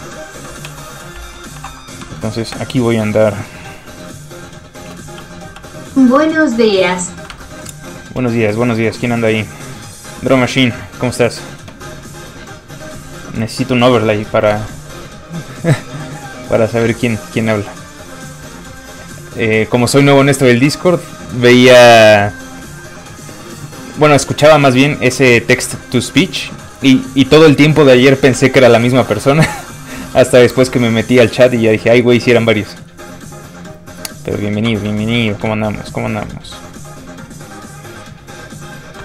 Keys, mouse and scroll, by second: 0.7 shift+click, 0.8 w, 1.6 alt+m, 1.8 middle click, 2.1 shift+middle click, 2.3 middle click, 2.4 middle click, 2.5 shift+space, 5.2 space, 5.3 f, 5.4 click, 5.6 f, 5.7 click, 5.9 middle click, 6.3 scroll up 1, 6.6 shift+middle click, 7.3 alt+shift+Tab, 8.6 alt+click, 12.9 click, 16.4 alt+click, 18.4 alt+Tab, 19.4 alt+click, 24.8 middle click, 25.2 shift+middle click, 25.4 middle click, 25.5 middle click, 25.7 shift+middle click, 26.1 shift+middle click, 26.4 middle click, 26.5 shift+middle click, 28.5 shift+middle click, 28.8 alt+shift+middle click, 31.9 ctrl+shift+click, 35.2 ctrl+click, 35.3 ctrl+z, 35.6 ctrl+shift+click.